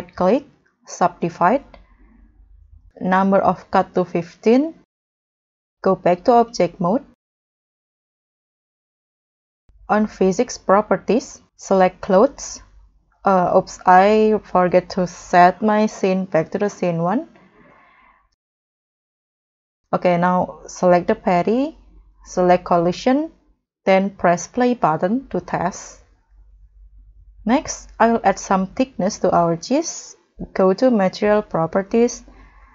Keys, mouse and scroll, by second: 3.8 1, 3.9 5, 4.3 Return, 6.8 middle click, 7.4-8.8 scroll up 1, 13.0 middle click, 13.3-14.3 scroll down 7, 14.5 scroll down 1, 14.5-15.0 scroll up 3, 18.0 scroll up 2, 18.6 middle click, 18.9 scroll down 1, 19.3-19.7 scroll up 3, 20.2-20.6 scroll up 1.